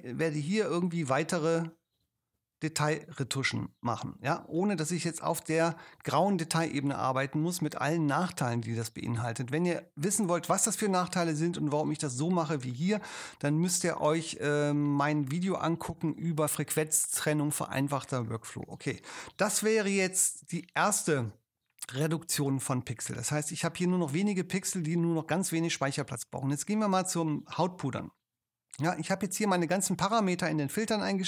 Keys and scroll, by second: 18.7 super+0.